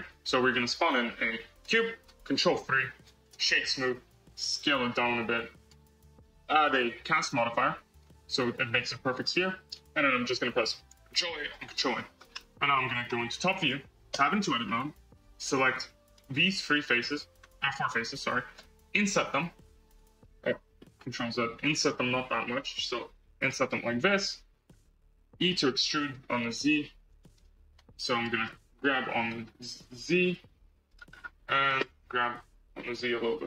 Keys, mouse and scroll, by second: 0.0 shift+a, 2.4 ctrl+3, 3.1-4.5 right drag, 4.5 s, 6.2 click, 6.6-9.0 drag, 10.9 ctrl+a, 11.4 ctrl+a, 13.0 KP_7, 14.0 Tab, 14.6 scroll up 4, 15.7 3, 16.0 click, 16.4 shift+click, 16.7 shift+click, 17.0 shift+click, 18.4 i, 21.1 ctrl+z, 21.8 i, 23.6-24.6 middle drag, 24.6 scroll down 2, 25.2 e, 27.6 KP_1, 28.3 scroll, 28.7 g, 31.0 scroll, 32.0 g.